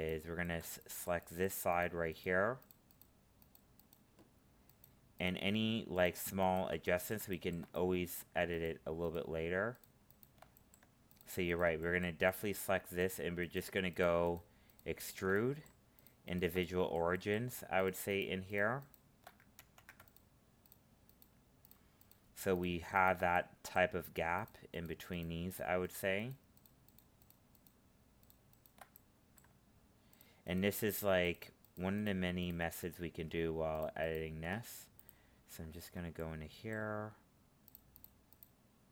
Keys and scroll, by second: 19.5 ctrl+z.